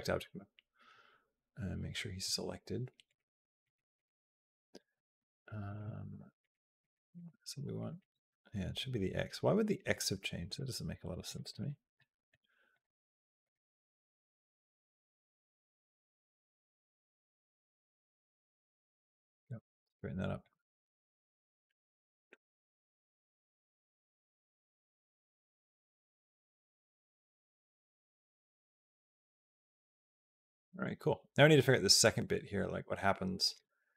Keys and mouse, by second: 2.9 click, 3.4 click, 3.7 click, 4.7 middle click, 5.5 click, 6.2 click, 6.6 click, 6.9 click, 7.7 click, 10.3 click, 11.0 click, 11.2 click, 11.8 middle click, 12.5 click, 13.2 click, 14.2 b, 15.6 g, 20.3-33.4 drag, 33.4 space.